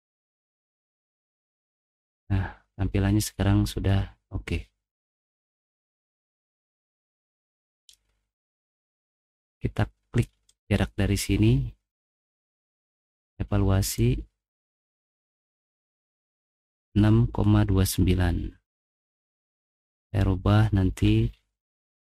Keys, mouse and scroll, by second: 0.2 middle click, 0.2 scroll up 2, 0.6 middle click, 1.0 middle click, 1.3 middle click, 1.5 middle click, 2.1 middle click, 6.0 click, 7.0 middle click, 8.3 middle click, 10.5 click, 13.1 click, 13.8 click, 14.6 click.